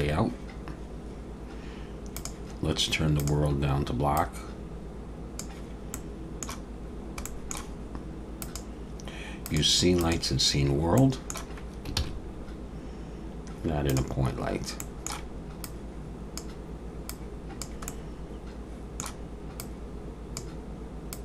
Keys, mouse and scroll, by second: 2.2 click, 5.9 middle click, 6.8-7.2 scroll down 2, 7.2 middle click, 8.4 click, 10.6-11.1 scroll up 2, 11.0 middle click, 12.0 shift+a, 14.4-14.8 scroll down 2, 14.8 middle click, 15.6 click, 17.1 click, 17.9 middle click, 19.6 click, 21.1 click.